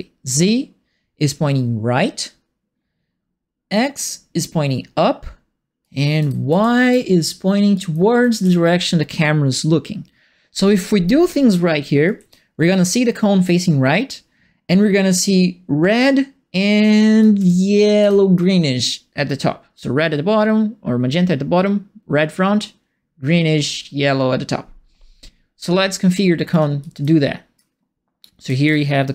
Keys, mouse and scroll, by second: 5.8-8.6 right drag, 5.9-8.9 typing, 12.0-13.4 right drag, 12.1 a, 12.8 q, 17.2-18.3 right drag, 17.3 w, 17.9 e, 26.3-29.1 typing, 26.5-29.1 right drag.